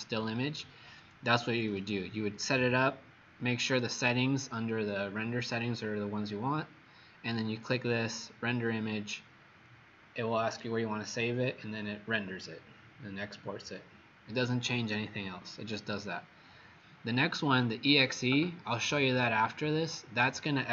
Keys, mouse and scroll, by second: 1.8 click.